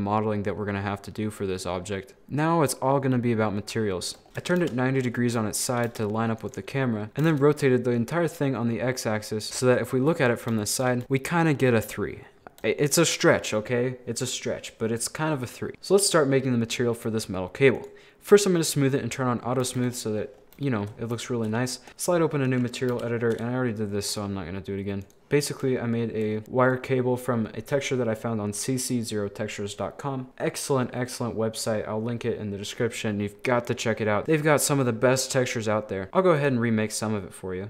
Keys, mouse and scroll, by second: 1.4 scroll down 1, 1.6-4.3 middle drag, 4.3 r, 5.2-5.5 scroll up 4, 5.5 shift+middle click, 5.9 g, 6.8 middle click, 7.2 r, 9.5 KP_1, 9.6 shift+middle click, 10.4 scroll down 3, 10.6 shift+middle click, 10.9 scroll up 2, 11.0-13.0 shift+middle drag, 15.7-17.4 drag, 17.8 click, 19.7 a, 19.8 a, 19.9-20.4 scroll up 12, 20.7 shift+middle click, 21.0 scroll up 6, 21.2 shift+middle click, 21.7-22.5 scroll down 13, 21.9 click, 22.5 middle click, 22.9 n, 23.2-24.1 scroll up 4, 24.1-25.5 drag, 25.5 scroll down 1, 25.6 shift+middle click, 26.4-26.7 scroll up 1, 26.7 click, 30.4-34.2 middle drag, 34.2 scroll up 2, 35.2-35.5 scroll down 5, 35.6 middle click, 36.1 Delete.